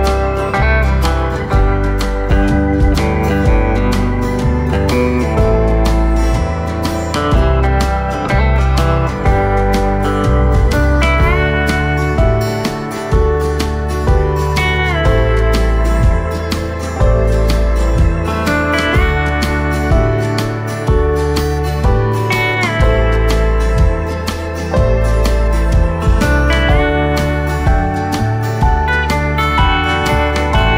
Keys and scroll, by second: 4.9 v, 25.7 ctrl+d, 27.0 v.